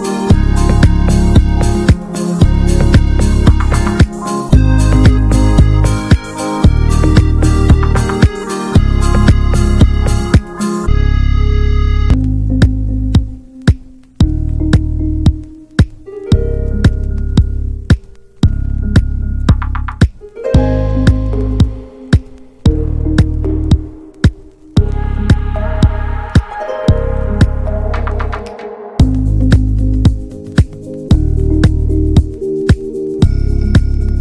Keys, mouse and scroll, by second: 0.4 ctrl+scroll up 1, 0.6 ctrl+s, 0.8 drag, 1.0 scroll up 2, 1.4-2.7 right drag, 2.7 middle drag, 3.0 ctrl+s, 3.2 click, 3.8 middle click, 4.0 scroll up 1, 4.6 middle drag, 4.8 ctrl+s, 5.1 shift+middle click, 5.3 Tab, 5.5-6.4 middle drag, 6.4 click, 7.4 ctrl+b, 9.2 drag, 9.3 Tab, 9.5 scroll down 2, 9.6-10.2 middle drag, 10.2 ctrl+s, 10.5 Tab, 10.7 click, 11.0-11.4 middle drag, 11.4 i, 12.6 middle drag, 12.8-13.6 scroll up 2, 13.0 shift+middle click, 13.6 e, 14.6 middle click, 15.0 ctrl+b, 16.3 click, 16.5 middle click, 16.9 shift+d, 18.0 middle click, 18.1 scroll up 1, 18.2-19.4 shift+middle drag, 19.4 e, 21.4-21.8 middle drag, 21.8-22.4 scroll up 1, 22.4 ctrl+b, 25.1 Tab, 25.3-25.6 middle drag, 25.6 Tab, 25.8 click, 26.0 middle click, 26.3 scroll up 1, 26.5 middle click, 26.8 i, 29.2 m, 29.5-30.3 middle drag, 30.3 2, 30.4-31.0 scroll up 1, 31.0 scroll up 1, 31.1 click, 31.4 alt+shift+click, 31.8-32.2 shift+middle drag, 32.2 scroll up 1, 32.4 ctrl+s, 33.0 ctrl+b.